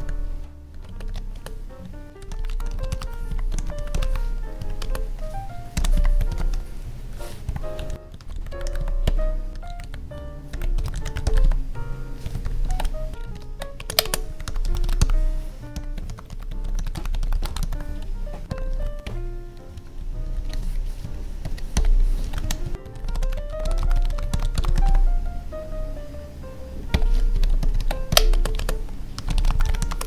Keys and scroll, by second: 0.7 Left, 0.8 space, 1.0 Left, 1.3 space, 4.5 Right, 4.8 space, 7.9 ctrl+s, 8.7 Tab, 11.4 Tab, 12.7 ctrl+s, 13.1 Up, 13.3 ctrl+Right, 13.7 space, 13.9 Left, 14.0 space, 17.7 Tab, 18.6 ctrl+s, 19.7 Down, 21.0 Up, 22.2 ctrl+s, 22.4 Up, 22.6 Tab, 22.7 ctrl+s, 24.8 Tab, 27.3 Up, 27.5 ctrl+Right, 28.0 Left, 28.3 space, 28.4 Left, 28.5 space.